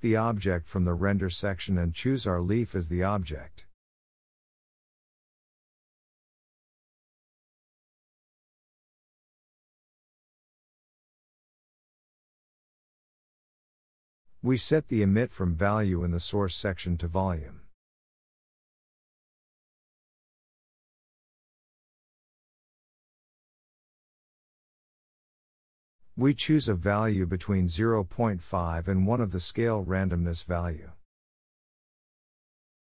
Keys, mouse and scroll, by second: 6.2 click, 7.4-8.1 scroll up 2, 8.1-9.4 scroll up 4, 8.3 shift+middle click, 9.4 shift+middle click, 10.2-11.0 scroll up 1, 11.0 click, 12.5-13.4 scroll up 1, 13.4-15.1 drag, 16.5-23.2 drag, 23.2-24.1 scroll down 1, 24.4-27.9 scroll down 10, 27.9-32.8 drag.